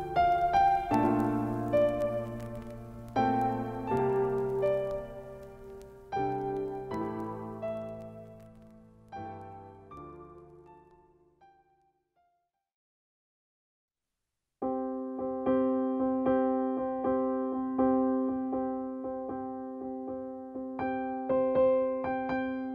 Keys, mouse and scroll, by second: 1.5 click, 4.3 click, 16.0 shift+Down, 19.2-22.7 drag.